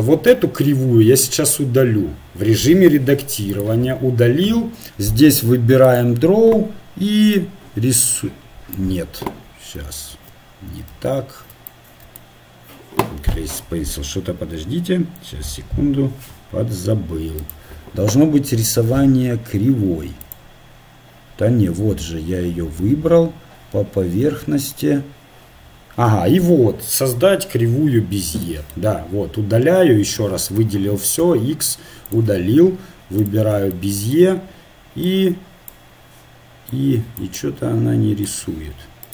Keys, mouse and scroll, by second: 0.3 a, 2.5 x, 6.0-8.6 drag, 10.1 ctrl+z, 10.9 ctrl+z, 17.4 click, 24.7 click, 28.9 click, 30.2 a, 30.6 a, 31.4 x, 33.2 click, 34.3-38.5 drag, 37.4-39.1 right drag.